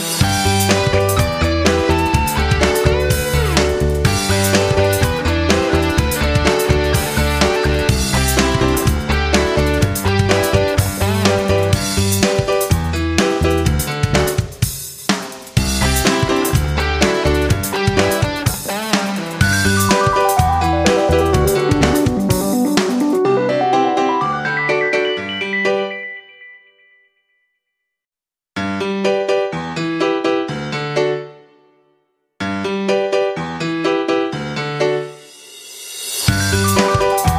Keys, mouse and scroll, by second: 4.7 F9, 5.4 click, 10.0 shift+click, 11.0 ctrl+z, 11.3 ctrl+z, 11.8 click, 14.6 F9, 15.3-16.3 drag, 17.4 click, 17.7 F9, 19.3 click, 22.6 click, 25.4 click, 27.5 F9, 28.0-31.8 drag, 32.8 right click, 33.9-37.3 drag.